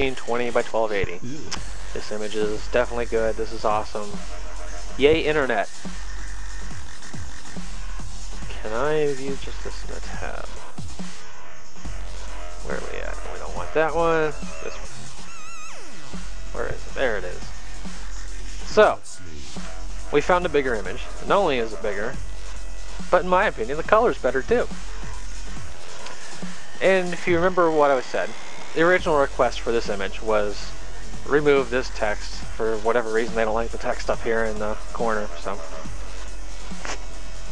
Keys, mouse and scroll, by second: 3.6 click, 6.3 click, 8.2 click, 9.1 right click, 10.3 click, 12.0 middle click, 12.8 click, 14.4 middle click, 17.0 click, 18.3 middle click, 21.8 click, 23.0 click, 26.6 click.